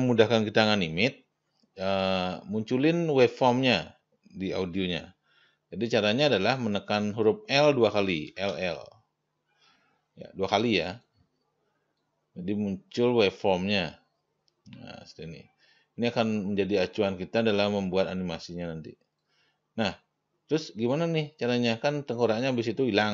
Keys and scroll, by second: 8.7 l.